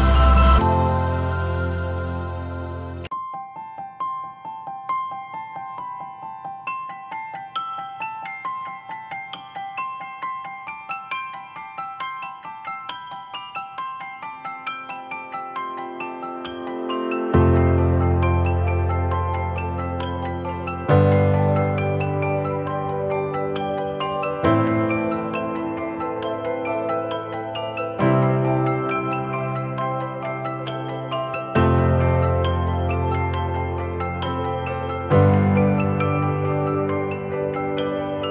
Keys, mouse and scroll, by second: 0.0 double click, 10.7 double click, 20.7-21.1 typing, 21.9 double click, 31.9-33.0 scroll down 1, 33.1 ctrl+-, 33.3 ctrl+-, 33.6 ctrl+-, 37.7 typing.